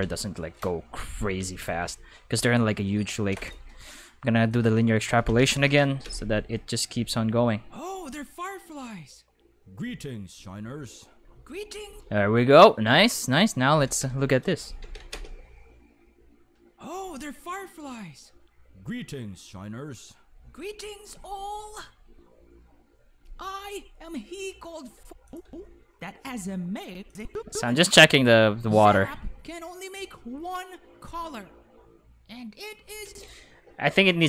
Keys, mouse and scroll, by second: 1.3 ctrl+s, 2.3 a, 3.3 shift+e, 4.5 click, 5.3 ctrl+s, 6.0 space, 11.8 space, 13.1 click, 14.8 ctrl+s, 15.1 space, 24.9 space, 25.2 click, 25.4 space, 26.8 space, 27.1 click, 27.3 space, 33.0 space.